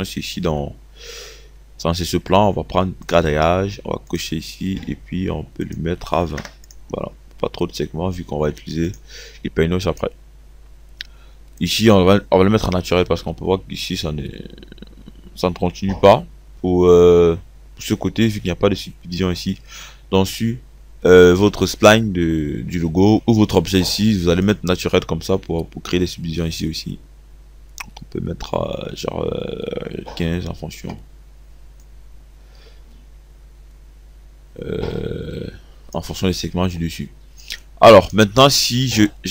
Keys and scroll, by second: 6.3 2, 6.5 0.